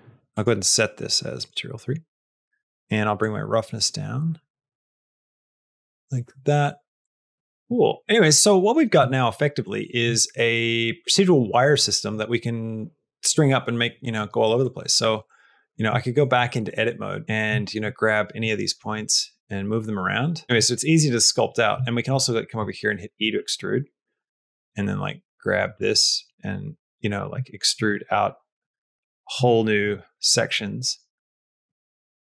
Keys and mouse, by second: 0.3 click, 0.5 click, 3.1-7.0 drag, 7.0 middle click, 7.4 shift+middle click, 7.6 middle click, 8.0 shift+middle click, 8.4 middle click, 8.9 shift+middle click, 11.2 middle click, 14.5 middle click, 15.1 Tab, 15.3 middle click, 15.8 shift+middle click, 17.2 a, 17.4 shift+middle click, 18.1 click, 18.3 middle click, 18.8 g, 20.4 middle click, 21.3 middle click, 21.7 shift+middle click, 22.1 click, 22.4 middle click, 23.1 e, 23.5 middle click, 24.1 g, 25.7 middle click, 27.2 shift+g, 27.3 shift+middle click, 27.8 e, 28.5 e, 29.5 e, 29.8 middle click, 31.0 e, 31.6 e.